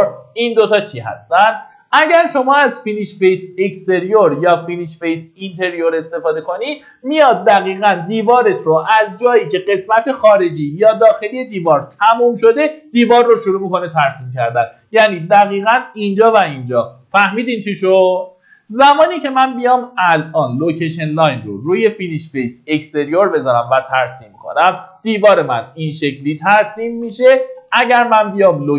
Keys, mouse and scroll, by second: 25.6 middle click, 27.0 Escape, 28.5-28.7 drag.